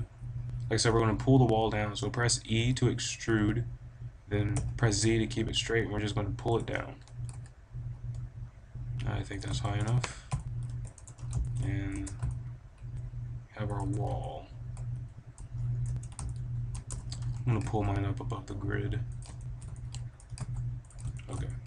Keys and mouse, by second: 1.4-3.4 middle drag, 2.5 e, 6.5-7.5 drag, 6.9 g, 9.9-10.3 drag, 9.9 KP_5, 10.3 middle click, 10.9 Tab, 11.6 middle click, 12.0 Tab, 12.8 middle click, 13.7 Tab, 14.7-15.5 drag, 15.8 Tab, 16.0 middle drag, 16.8 Tab, 17.4 g, 18.0 middle drag, 20.2 g.